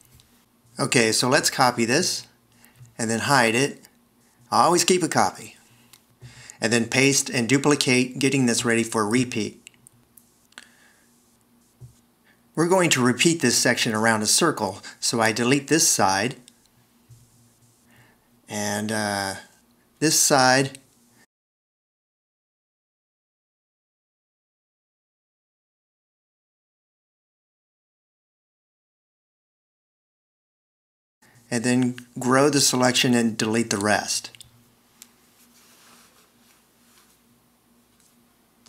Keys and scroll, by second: 3.6 super+c, 4.8 h, 6.1 super+v, 16.5 d, 17.9 alt+r, 18.9 alt+e, 20.8 super+x, 24.2 alt+e, 25.6 super+x, 32.7 =, 38.2 super+x.